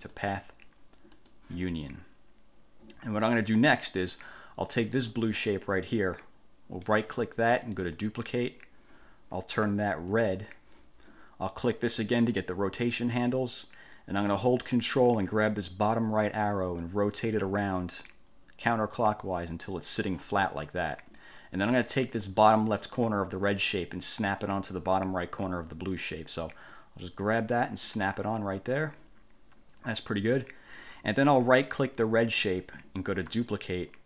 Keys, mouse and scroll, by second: 0.3 click, 1.3 click, 5.1 click, 7.0 right click, 8.1 click, 10.3 click, 12.3 click, 17.0-20.5 ctrl+drag, 26.9-29.2 drag, 31.8 right click, 33.5 click.